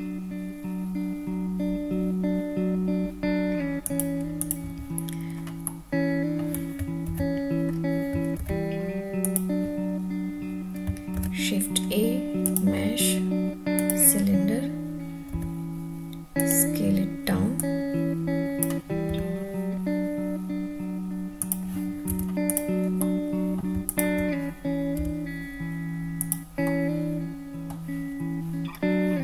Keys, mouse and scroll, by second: 3.9 click, 4.4 click, 5.6-6.3 middle drag, 7.1 ctrl+s, 7.4-9.1 scroll down 2, 8.4 ctrl+s, 9.3 click, 10.0-15.5 middle drag, 11.1 shift+a, 15.3 s, 16.4 drag, 16.7-17.6 middle drag, 17.6-18.6 drag, 19.0 s, 20.7 middle click, 21.4 click, 22.3 Tab, 22.3 alt+z, 22.3 3, 22.4 click, 23.0 middle click, 23.8 shift+click, 25.0 i, 26.2 click, 26.6-27.7 middle drag, 28.7 scroll up 1.